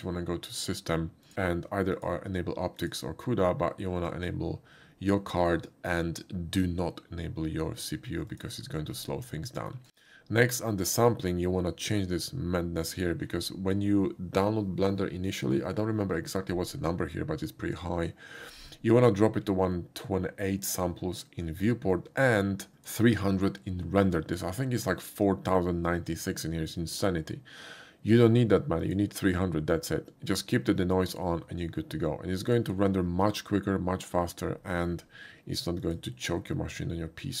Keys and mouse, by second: 1.0 click, 1.2 click, 1.9 click, 2.8 click, 8.3 click, 9.4 shift+middle click, 10.8 shift+click, 12.9 click, 22.7 click, 28.8 click, 32.4 click, 35.8 click.